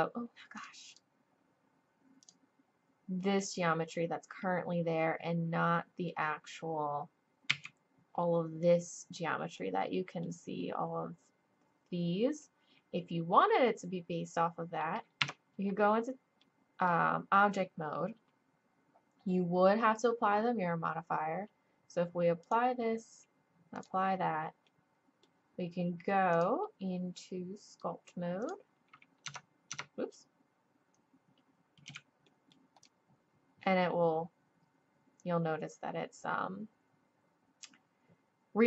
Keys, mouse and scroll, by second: 0.6 click, 2.3 click, 4.4-5.6 drag, 5.6-6.6 middle drag, 7.5 z, 9.6 middle click, 12.6-14.1 middle drag, 14.4 click, 15.2 Tab, 16.1 click, 16.8-18.4 drag, 22.4-22.7 drag, 28.2 click, 29.3 Tab, 29.7 Tab, 31.9 z.